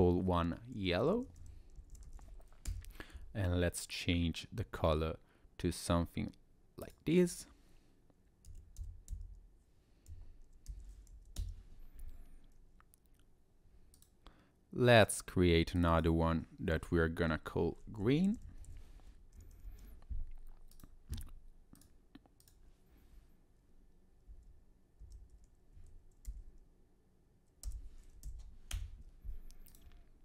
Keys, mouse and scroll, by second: 3.9 click, 9.1 b, 14.0 click, 15.0 click, 15.8 click, 15.9 click, 18.6 e, 20.7 click, 21.8 click, 29.7 click.